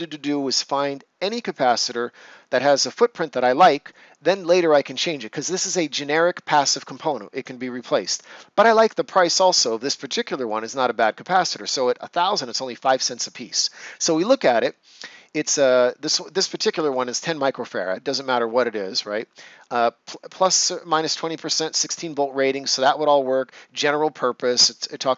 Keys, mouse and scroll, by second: 13.2 click, 13.6 scroll down 1, 25.0 scroll down 1.